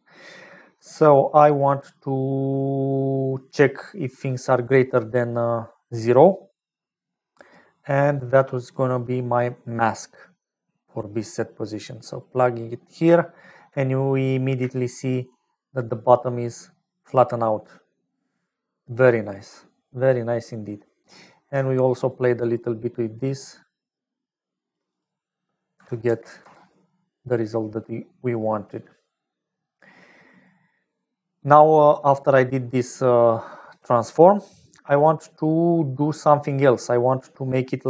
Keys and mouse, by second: 3.4 click, 8.1 middle click, 9.0 middle click, 10.9 middle click, 13.1 shift+middle click, 14.7 shift+middle click, 15.4-18.8 middle drag, 22.2-24.7 shift+drag, 24.8-27.1 drag, 31.0 middle click, 32.0-34.8 drag, 35.5 click, 36.8 middle click.